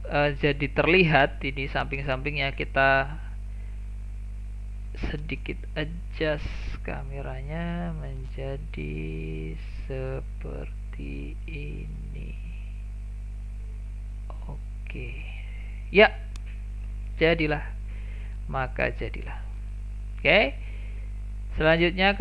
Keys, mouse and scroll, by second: 3.1 click, 4.6-5.7 scroll up 1, 5.7-15.9 middle drag, 15.9 click, 18.9 click, 19.5 click.